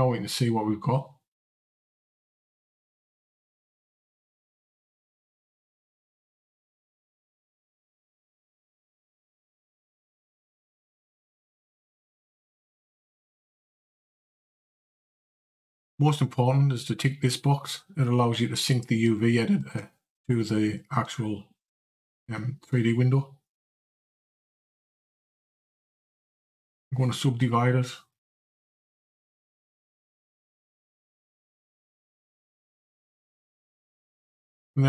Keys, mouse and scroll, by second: 2.0 click, 4.4 click, 13.0 click, 14.1 a, 18.5 click, 19.6-24.6 scroll down 2, 25.7 q, 28.0 click, 29.1 click.